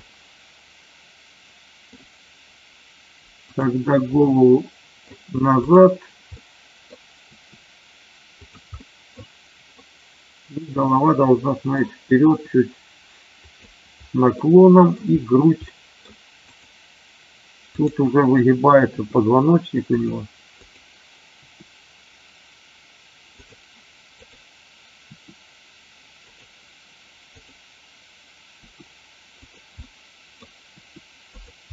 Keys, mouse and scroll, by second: 0.0-1.8 middle drag, 3.3 click, 4.1-5.0 middle drag, 5.6 drag, 6.2-6.8 middle drag, 7.1 r, 8.7 middle click, 9.7-11.6 middle drag, 12.2 r, 13.3 click, 14.3 middle click, 15.6 middle click, 16.5 click, 17.6-18.3 drag, 18.9 r, 19.9 click, 21.4 r, 23.3 click, 24.1 click, 25.0 r, 26.3 click, 28.5 r, 29.4 click, 29.8 middle click, 30.6 r.